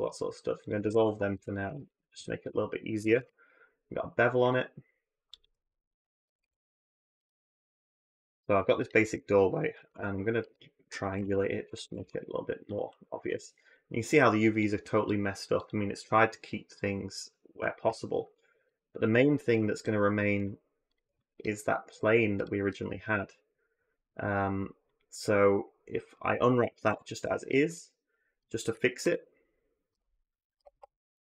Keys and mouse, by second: 0.6 a, 0.7 a, 1.1 2, 1.7 alt+click, 2.8 ctrl+b, 6.0 middle click, 6.1-8.0 typing, 7.1 middle click, 7.6 middle click, 9.7 ctrl+t, 11.0 alt+j, 11.6 a, 11.8 a, 13.1 a, 20.7 shift+click, 21.7 ctrl+click, 22.2 ctrl+click, 26.7 u, 28.9 a, 29.7 r.